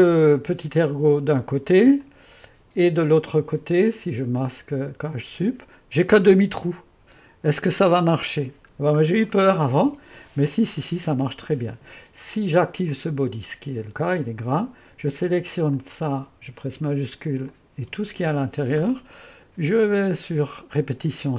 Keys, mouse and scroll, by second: 5.3 space, 6.1-7.8 drag, 9.4-12.7 middle drag, 12.9-16.8 drag, 17.6 click, 20.0-21.1 drag.